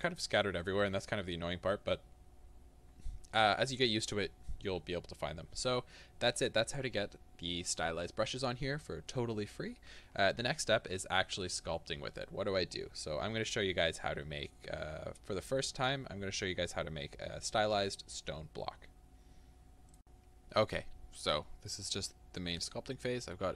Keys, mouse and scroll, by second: 20.1-23.5 middle drag.